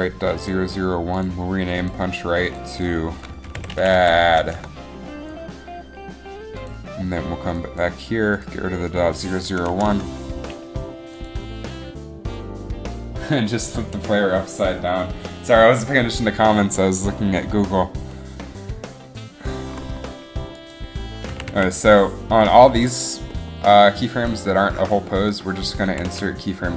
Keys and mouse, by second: 0.6 click, 6.6 click, 9.8 BackSpace, 10.0 BackSpace, 21.4 a, 21.7 a, 26.1 a, 26.2 a.